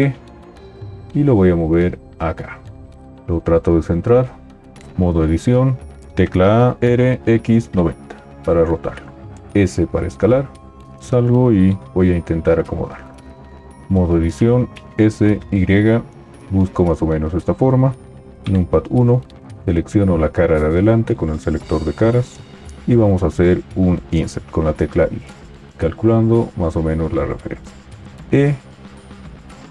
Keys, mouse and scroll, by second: 4.8 Tab, 6.1 a, 6.7 r, 9.5 s, 11.0 t, 13.8 t, 14.9 s, 14.9 y, 18.4 KP_1, 24.7 i, 28.2 e.